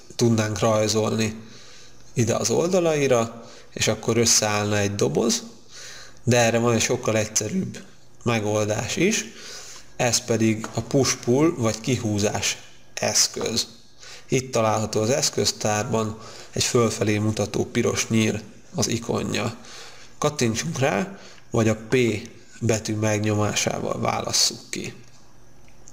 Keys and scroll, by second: 22.0 p.